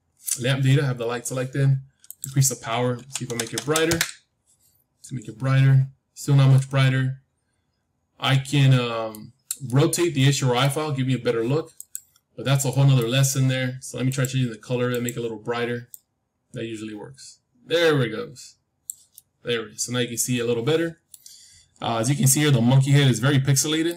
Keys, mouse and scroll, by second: 2.0-4.0 drag, 3.4 KP_0, 3.5 KP_0, 5.3-6.3 scroll up 1, 6.3 scroll up 1, 6.5-8.7 middle drag, 9.6-11.6 middle drag, 11.7-13.7 drag, 12.6-14.6 middle drag, 14.0-16.8 drag, 19.1-21.1 middle drag, 21.4-23.4 middle drag, 23.4 scroll down 1, 23.5-23.9 middle drag.